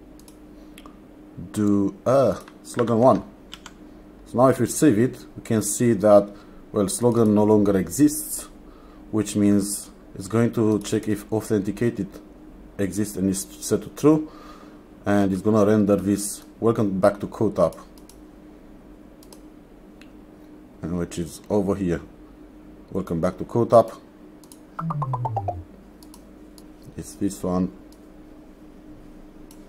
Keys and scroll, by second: 2.9 1, 3.6 ctrl+s.